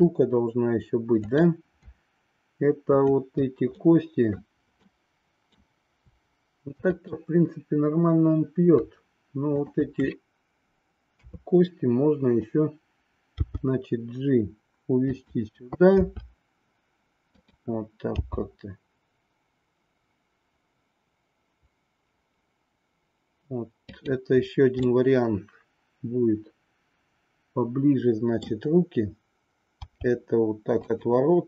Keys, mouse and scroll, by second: 3.0-4.3 shift+drag, 4.7 middle click, 6.8-8.2 drag, 9.6-10.7 shift+drag, 11.2 KP_3, 13.2 g, 16.0 r, 18.1 g, 24.9 scroll up 1, 24.9-28.4 middle drag, 28.4-29.8 scroll down 1, 29.8 r.